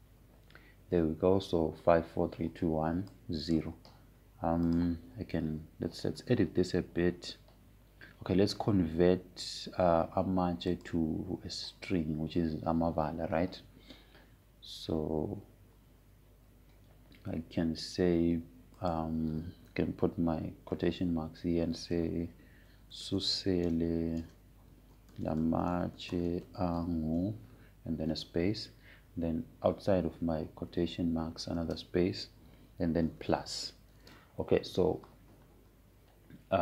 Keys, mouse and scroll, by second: 0.0-1.2 typing, 4.8-6.3 drag, 12.3 click, 20.5 click, 23.7-29.7 typing, 32.4 Right, 33.2 space, 34.7 shift+=, 35.7 space.